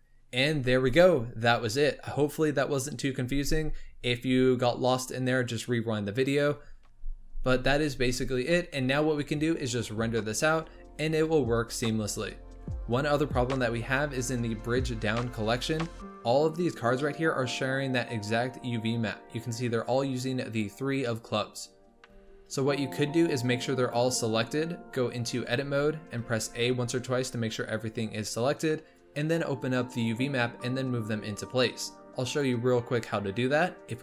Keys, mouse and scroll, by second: 17.0-20.0 middle drag, 21.0-22.0 middle drag, 22.0 Tab, 23.3 click, 25.4 Tab, 26.2 a, 27.4-27.9 scroll down 2, 28.9-34.0 drag.